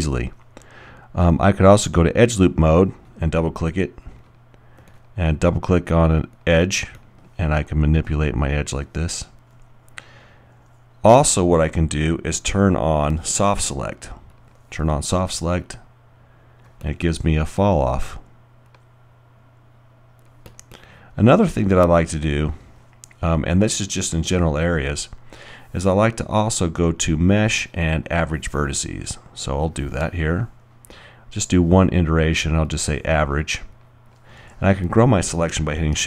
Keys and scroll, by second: 18.0 alt+r.